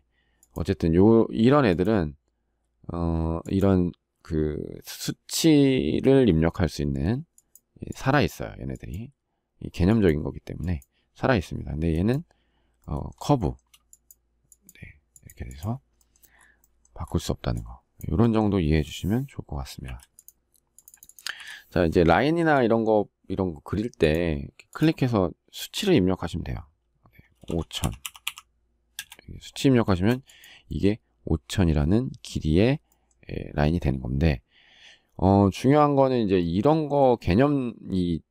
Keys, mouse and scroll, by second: 13.1 shift+middle click, 19.6 Delete, 21.1 Delete, 21.9 shift+middle click, 28.7 Return.